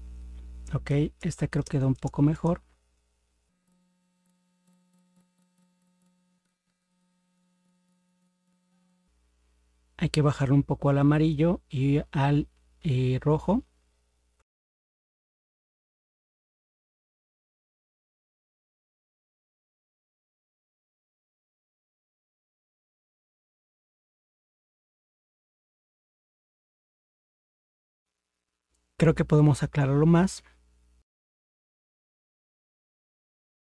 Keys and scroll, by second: 1.2 ctrl++, 1.6 ctrl++, 14.4 ctrl+-, 21.5 ctrl+0, 26.8 ctrl+0, 32.1 ctrl++, 32.2 ctrl++.